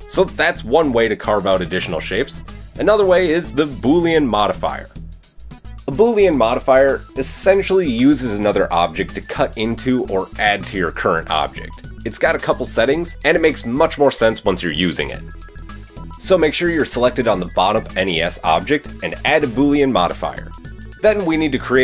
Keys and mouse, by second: 0.1 click, 0.2-0.6 middle drag, 0.6 click, 1.0 drag, 1.0 middle click, 3.9-5.6 middle drag, 6.2-8.1 middle drag, 8.1-17.3 drag, 9.5 KP_3, 19.1 middle click.